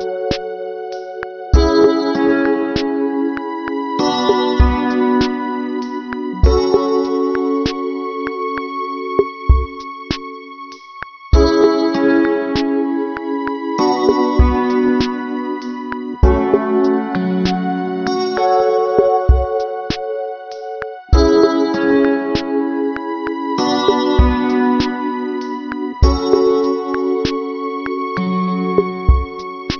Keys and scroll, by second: 12.6 ctrl+-, 14.2 ctrl+-, 16.0 ctrl+=, 23.9 ctrl+=, 26.0 ctrl+alt+shift+n.